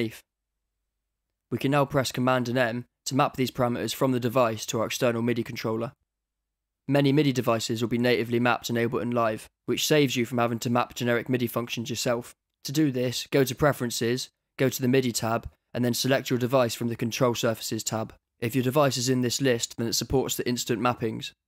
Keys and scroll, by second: 8.6 super+m.